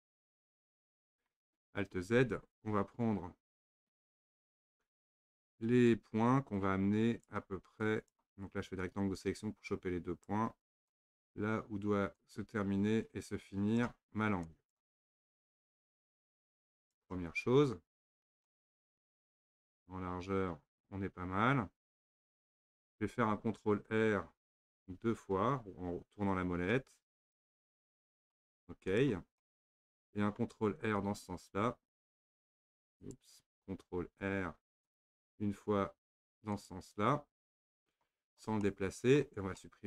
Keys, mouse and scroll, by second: 0.5-2.1 shift+middle drag, 2.1 alt+z, 4.2 click, 5.9 click, 7.8 click, 8.8 click, 10.9 click, 12.2 click, 14.5 click, 15.5 click, 18.5-21.5 middle drag, 23.8 ctrl+r, 28.9 click, 29.4-32.1 middle drag, 32.1 ctrl+e, 33.1 click, 34.1 ctrl+r, 38.7-39.8 middle drag.